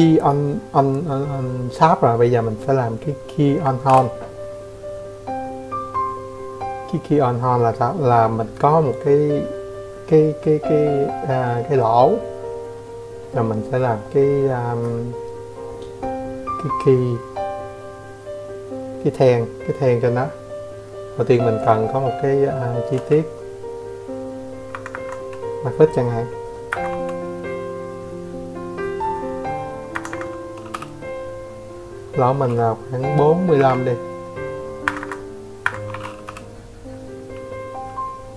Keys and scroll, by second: 6.6 ctrl+n, 20.5 space, 22.2 Escape, 22.4 Escape, 22.6 c, 24.2 Escape, 24.4 c, 27.4 Escape, 27.6 Escape, 28.3 m, 31.1 typing, 32.4 Escape, 32.5 Escape, 33.1 Escape, 33.8 m, 36.4-38.1 typing.